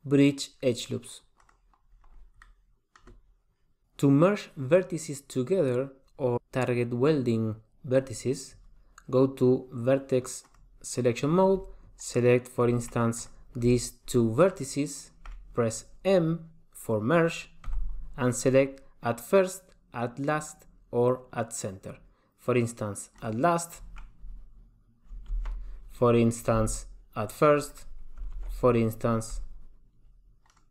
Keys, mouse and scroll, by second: 2.6 middle click, 10.7 click, 13.4 click, 14.7 shift+click, 17.9 m, 25.5 super+z, 26.7 m, 28.6 super+z, 29.5 m.